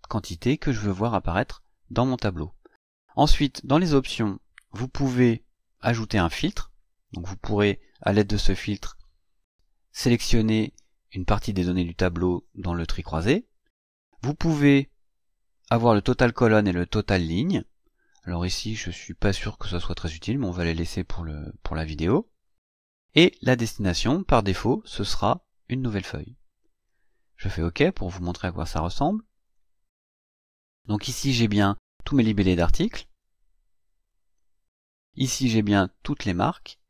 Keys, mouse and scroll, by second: 3.9 click, 6.0 click, 23.4 click, 29.4 click, 34.1 click.